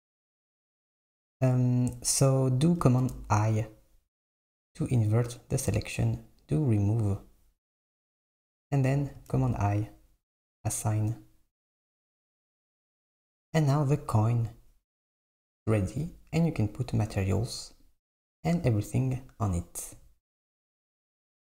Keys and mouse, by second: 3.1 i, 6.8-9.3 drag, 9.4 i, 10.7-11.9 drag, 11.9 Tab, 13.1 click, 15.0 click, 17.4-20.1 drag.